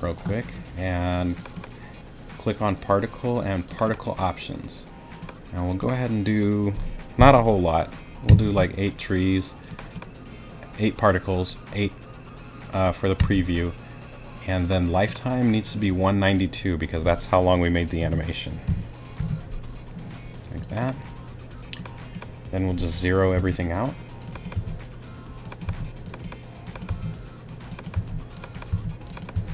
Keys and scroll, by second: 8.3 8, 13.2 8, 18.0 i, 23.3 0, 24.5 0, 26.6 0, 26.9 0.